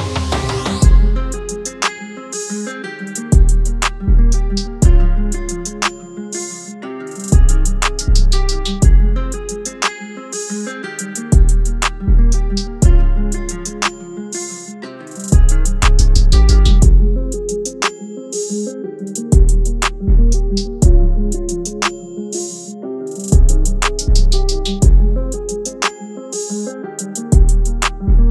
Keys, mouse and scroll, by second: 11.7-12.8 typing, 13.5-16.8 drag, 16.8 v, 17.8 click, 23.6-25.2 typing, 27.1 click.